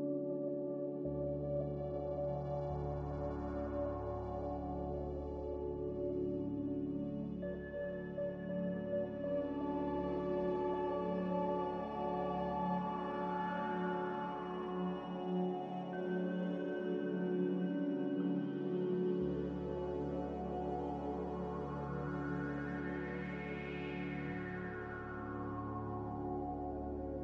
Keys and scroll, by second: 0.9 x, 6.3 g, 12.3 z, 20.4 c, 24.9 F9, 25.1 z, 27.1 z.